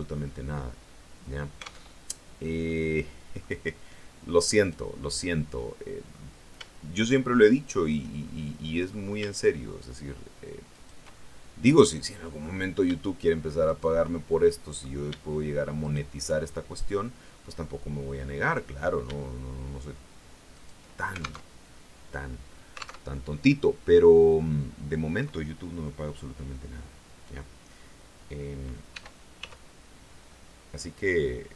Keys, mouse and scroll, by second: 1.7 alt+Tab, 2.5 middle click, 4.4 right click, 4.9-6.2 middle drag, 7.4 shift+right click, 8.1 shift+middle click, 9.7 shift+right click, 10.6 shift+right click, 11.0-12.5 shift+middle drag, 13.5 shift+right click, 14.0 shift+middle click, 15.7 shift+right click, 16.3-18.9 shift+middle drag, 20.4 shift+right click, 21.3 alt+Tab, 22.9 alt+Tab, 23.3-25.3 middle drag, 28.8 e, 29.3 s.